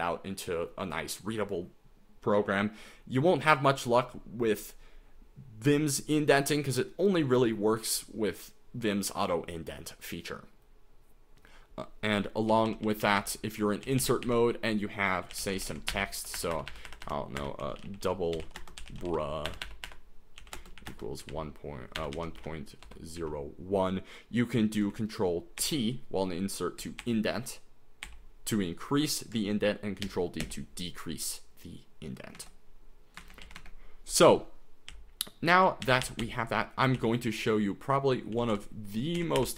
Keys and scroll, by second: 12.7-23.2 typing, 25.6 ctrl+t, 27.0 ctrl+t, 28.1 ctrl+t, 30.1 ctrl+d, 30.4 ctrl+d, 32.4 Escape, 33.0-33.9 typing, 35.1-39.4 typing.